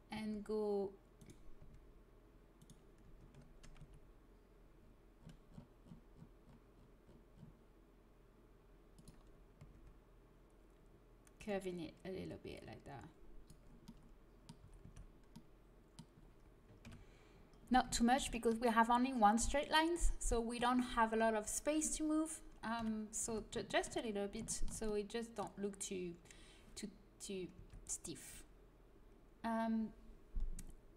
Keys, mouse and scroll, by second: 0.1 r, 1.5 r, 3.7 g, 9.5 r, 12.2-14.1 drag, 14.5 a, 14.8 Tab, 16.8 KP_3, 22.7 KP_3, 23.2 Tab, 23.6-26.2 middle drag, 27.5 Tab.